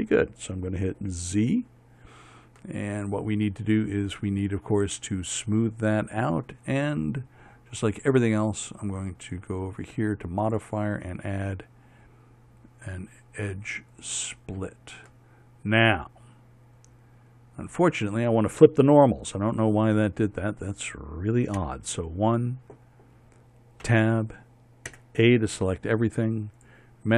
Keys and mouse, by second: 1.8 z, 6.1-9.3 drag, 9.9-14.7 drag, 22.2 KP_1, 24.5 Tab, 25.6 a.